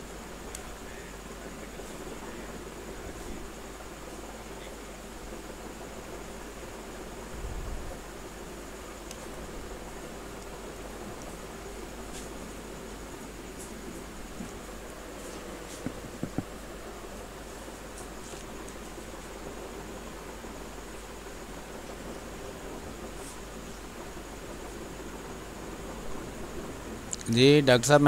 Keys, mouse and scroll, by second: 0.0-1.0 typing, 0.8 click, 3.0 click, 5.0 space, 6.6 r, 6.7 click, 9.0 b, 9.2 click, 9.5 space, 10.1 space, 13.0-17.2 drag, 18.3 space, 18.6 click, 18.8 space, 19.8-21.5 drag, 21.5 space, 21.6 click, 22.0 space, 22.9 click, 24.0 space, 24.2 click, 24.4 space, 25.6-27.9 drag.